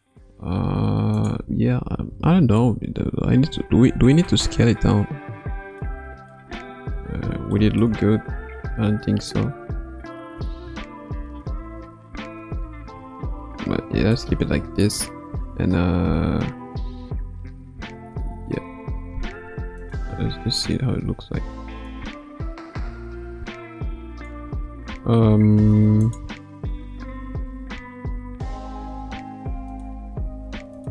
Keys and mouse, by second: 2.1 KP_1, 2.5 KP_3, 3.9 KP_1, 4.7-5.9 middle drag, 6.3-6.7 middle drag, 7.7 shift+middle click, 9.2 r, 13.3 ctrl+z, 14.1-14.9 middle drag, 17.9 a, 18.7 i, 19.8 click, 20.2 space, 21.0 space, 24.1 click, 26.0 click, 27.4 r, 30.8 click.